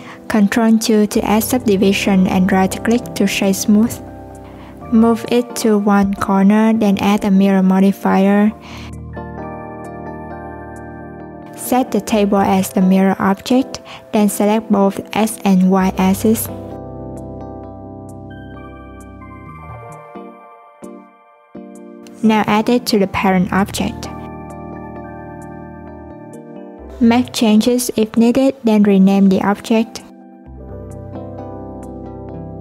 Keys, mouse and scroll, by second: 0.0 ctrl+2, 0.7 alt+z, 1.8 right click, 4.5 click, 5.4 alt+z, 6.4 g, 9.4-15.2 drag, 16.0-17.1 scroll down 1, 17.1 click, 18.7 click, 19.5 alt+z, 19.9-20.5 scroll down 1, 20.5 click, 21.0-22.8 scroll down 2, 22.8 click, 23.6 shift+click, 24.4 ctrl+p, 26.4 click, 27.0 click, 31.2 alt+z, 31.6 click.